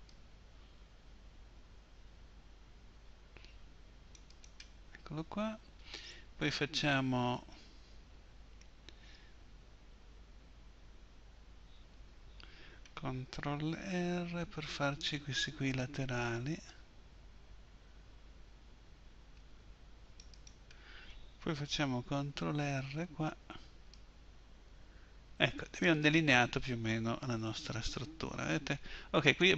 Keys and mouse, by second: 14.2 ctrl+r, 20.4-23.2 drag, 23.2 ctrl+r, 27.5 z.